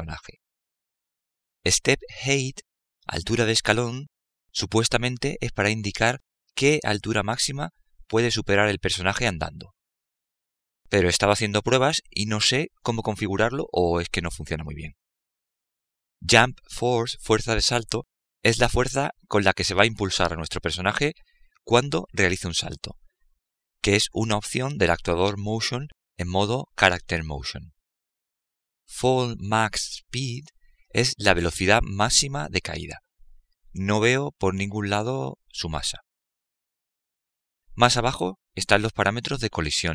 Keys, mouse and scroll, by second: 36.5 click.